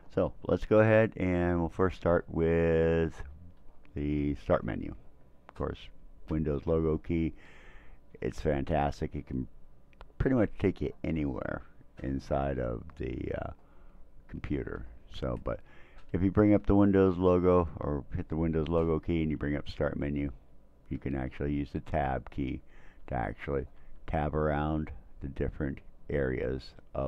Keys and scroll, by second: 21.9 Tab, 23.0 Tab, 23.8 Tab, 24.4 Tab.